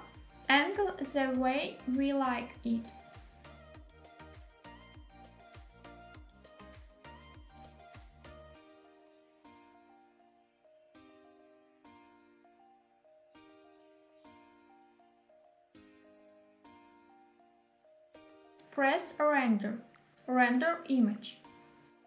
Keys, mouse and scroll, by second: 2.2 click, 2.5 g, 2.7 x, 4.5 click, 5.8 g, 6.0 y, 8.2 click, 9.1 r, 9.4 x, 12.6 click, 13.2 g, 13.5 z, 17.4 click, 19.1 click.